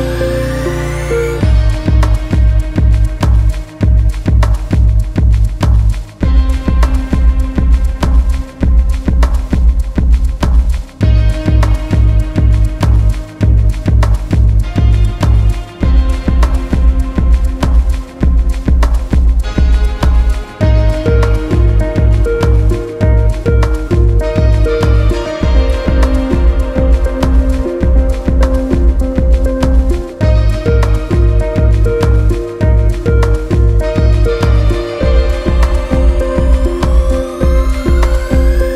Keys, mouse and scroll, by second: 0.0 click, 0.4 m, 0.8 a, 1.0 alt+shift+right click, 1.2-2.2 middle drag, 2.2 right click, 2.5 g, 2.9 a, 3.1 alt+shift+right click, 3.4 scroll down 3, 3.6 scroll up 1, 3.9 right click, 4.1 g, 4.6 right click, 4.8 g, 5.2-5.6 scroll up 1, 5.6 a, 5.7 z, 5.8 middle click, 6.5 alt+shift+right click, 6.7 scroll down 2, 6.9 middle click, 7.2-8.0 scroll up 2, 7.5-11.2 typing, 8.0 right click, 9.5 right click, 10.7 alt+shift+right click, 10.9 scroll down 1, 11.4 alt+shift+right click, 11.6 middle click, 12.2 a, 12.5 alt+shift+right click, 12.6 middle click, 13.0 click, 13.4 m, 13.9 right click, 14.1 right click, 14.2 alt+shift+right click, 14.6 middle click, 15.4 scroll up 1, 15.7 right click, 16.3 shift+right click, 16.5 m, 17.0 a, 17.4 alt+shift+right click, 18.0 alt+shift+right click, 18.3 click, 19.0 m, 19.3 a, 19.6 alt+shift+right click, 20.0 right click, 20.3 g, 21.0 click, 21.4 m, 21.8 a, 22.1 alt+shift+right click, 22.4 alt+shift+right click, 22.6 middle click, 23.0 scroll up 1, 23.2 right click, 23.4 g, 23.9 click, 24.1 m, 24.5 a, 24.6 middle click, 24.9 alt+shift+right click, 25.0 scroll down 2, 25.2 middle click, 25.7 scroll up 1, 25.9 shift+middle click, 26.2 click, 26.5 m, 26.8 a, 26.9 middle click, 27.2 alt+shift+right click, 27.5 a, 27.8 middle click, 28.3 alt+shift+right click, 28.4 scroll down 1, 28.5 middle click, 28.9 alt+shift+right click, 29.0 middle click, 29.4 alt+shift+right click, 29.7 shift+middle click, 30.0 scroll up 2, 30.4 z, 30.7 z, 31.6 click, 33.6 click, 33.8 middle click, 34.9 scroll up 2, 35.2 scroll down 2, 35.4 middle click, 36.0 click, 36.5 Tab, 36.8 z, 36.9 scroll down 1, 37.0 middle click, 37.8 scroll down 1, 38.0 Tab, 38.1 middle click, 38.4 scroll up 1, 38.6 ctrl+Tab.